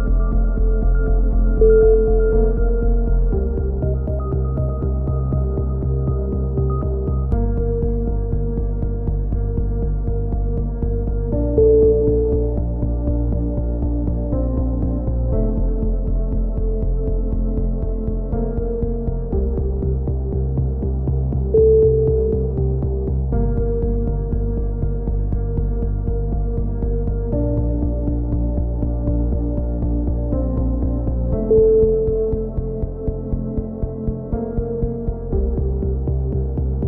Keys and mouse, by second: 0.0 right click, 0.3 right click, 0.4 KP_7, 0.5 z, 3.2 right click, 3.3 z, 3.8 click, 4.2 a, 4.5 z, 4.5-5.7 drag, 6.0 right click, 6.4 click, 6.7-8.2 typing, 7.4 right click, 8.4 click, 9.6-10.6 right drag, 10.6 ctrl+KP_1, 10.9 click, 11.7 click, 12.0-13.3 typing, 12.9 right click, 13.4 click, 16.6 ctrl+z, 17.1 click, 18.5 right click, 18.5 z, 19.2 middle click, 19.5 click, 20.2 a, 20.3 click, 20.3 z, 21.0 z, 21.2 click, 22.4 ctrl+KP_1, 22.5 z, 22.7 z, 23.0 z, 23.1 z, 23.2 click, 24.4 right click, 24.4 s, 24.9 z, 25.1 click, 25.4 a, 25.5 z, 25.6-26.6 right drag, 26.4 click, 26.7 a, 26.8 z, 27.6 z, 27.7 right click, 27.9 click, 29.0 ctrl+z, 30.0 ctrl+z, 30.0-31.1 right drag, 30.9 middle click, 31.1 click, 31.2 a, 31.3 z, 31.4 click, 31.9 KP_3, 32.0 z, 32.4 click, 33.8 click, 36.5 a, 36.6 a.